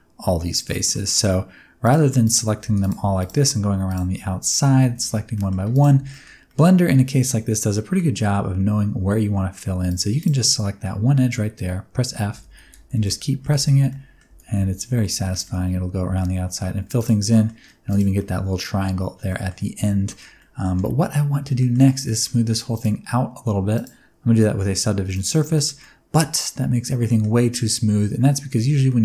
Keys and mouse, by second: 0.6 middle click, 1.8 click, 2.2 shift+click, 2.6 f, 3.8 click, 4.4 shift+click, 4.6 f, 4.9 shift+middle click, 5.3 middle click, 6.0 shift+middle click, 6.4 middle click, 7.7 middle click, 9.8 click, 10.1 click, 10.5 middle click, 12.0-14.8 typing, 13.0-13.4 middle drag, 13.8 middle click, 15.2 middle click, 16.0 f, 16.9 click, 17.3 middle click, 17.7 3, 17.8 click, 18.1 middle click, 19.2 middle click, 19.7 Tab, 20.0 shift+middle click, 20.3 middle drag, 21.5 shift+middle click, 21.8 middle click, 22.7 click, 23.7-25.2 drag, 25.5 shift+middle click, 25.7-27.1 middle drag, 28.6 Tab, 28.8 middle click.